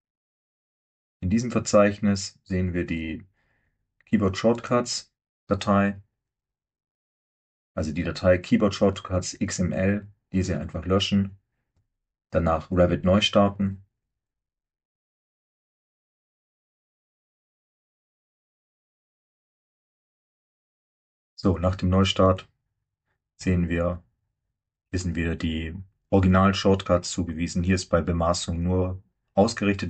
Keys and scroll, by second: 12.0 Delete.